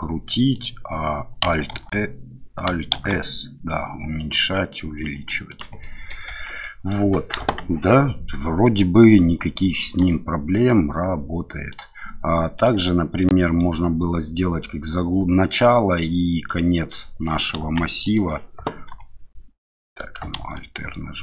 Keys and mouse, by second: 0.5 click, 1.7 alt+r, 2.9 alt+s, 5.5 click, 5.8 middle click, 6.3 Tab, 6.6-6.9 middle drag, 7.4 KP_1, 8.6-10.0 drag, 10.7-11.7 drag, 12.5 click, 13.2-13.6 middle drag, 16.5 middle click, 17.6 KP_1, 18.0 click, 18.9 r, 19.9 click, 20.4 alt+r.